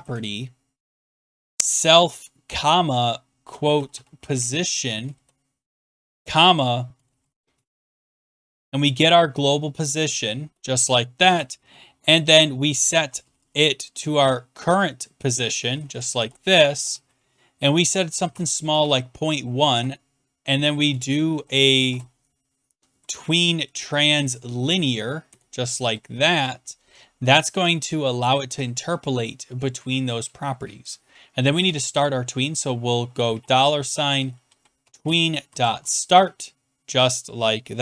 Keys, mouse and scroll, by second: 0.0-0.1 typing, 1.1-2.1 typing, 3.1-9.0 typing, 10.2-11.6 typing, 12.7-13.8 typing, 15.8 Down, 15.9 Down, 16.2 Return, 16.4-19.7 typing, 20.9 BackSpace, 21.0 BackSpace, 21.5 BackSpace, 21.7 Down, 21.7 BackSpace, 23.6 Down, 23.8 Down, 23.9 Down, 24.1 Down, 24.3 Down, 24.4 Down, 25.3 Return, 25.8 Right, 26.9 Return, 30.8 click, 31.5 Return, 33.3-36.3 typing.